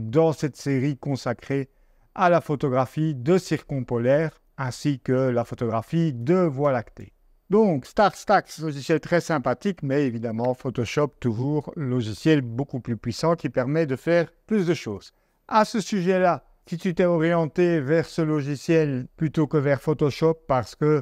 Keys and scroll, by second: 0.0 Down, 3.3 Down, 3.9 Down, 4.5 Down, 5.4 Down, 6.2 Down.